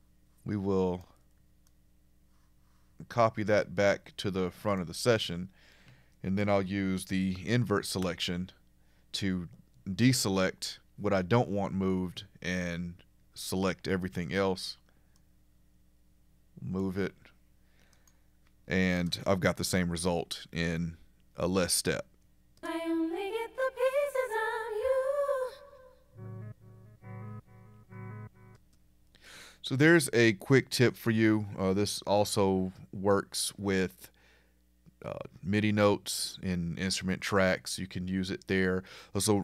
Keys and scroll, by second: 8.0 super+i, 19.0 Return.